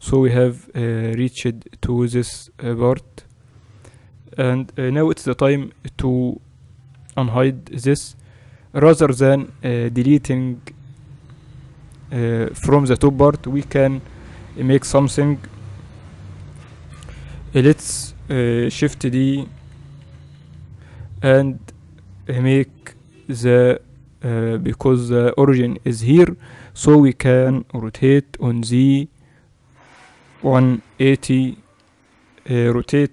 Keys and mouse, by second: 5.1 KP_1, 7.4 alt+h, 8.0 right click, 8.6 right click, 11.6 KP_7, 13.9 middle click, 13.9 KP_1, 16.4 m, 17.6-19.6 right drag, 18.8 shift+d, 22.5 KP_7, 28.1 r.